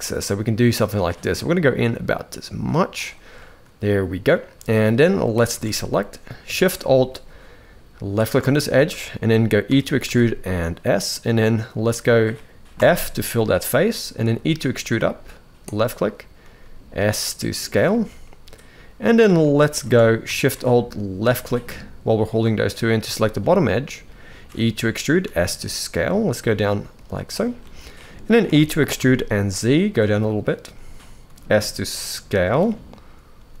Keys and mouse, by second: 3.1 middle click, 5.3 alt+a, 8.4-9.4 shift+middle drag, 9.4 e, 12.6 f, 14.0 e, 16.2 s, 18.0-18.8 middle drag, 19.5 alt+a, 20.9 alt+shift+click, 23.3 middle click, 24.2 e, 27.7 middle click, 28.2 e, 31.0 s, 32.4 middle click, 33.1 s.